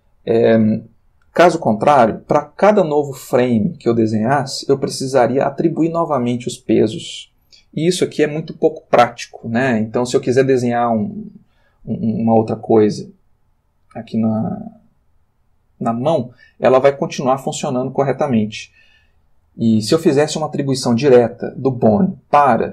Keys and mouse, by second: 21.7-22.3 drag.